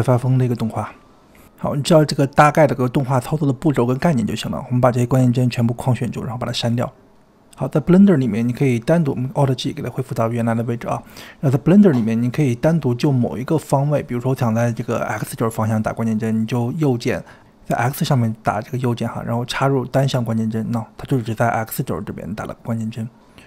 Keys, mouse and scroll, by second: 0.5 space, 5.5 click, 7.0 x, 7.9 click, 8.4 alt+g, 9.6-11.2 drag, 16.1 right click, 22.2 click.